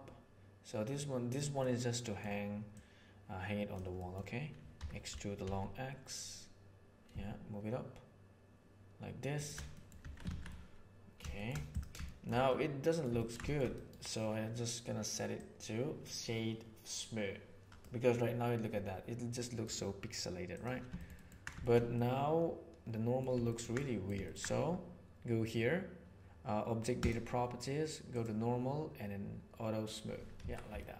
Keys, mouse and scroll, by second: 1.5 middle click, 2.7 click, 3.9 middle click, 4.7 e, 9.7 middle click, 10.0 Tab, 10.2 alt+a, 10.4-11.2 middle drag, 11.3 shift+middle click, 12.0 shift+middle drag, 12.4-12.9 middle drag, 13.1-13.5 ctrl+shift+middle drag, 13.7-18.2 right drag, 18.6 click, 19.6-20.6 right drag, 21.1 ctrl+middle click, 21.5 shift+middle click, 21.8-23.0 middle drag, 23.5 ctrl+middle click, 23.7 middle click, 23.8 click, 28.0 click, 29.7 click, 30.4 alt+a, 30.8 middle click.